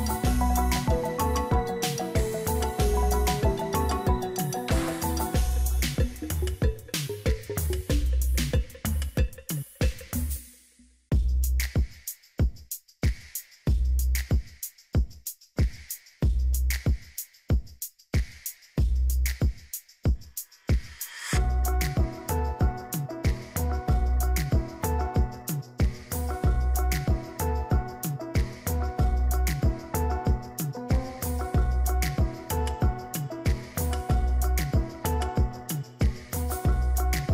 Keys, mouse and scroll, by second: 3.0 right click, 14.9 ctrl+click, 29.3 click, 36.5-37.3 typing.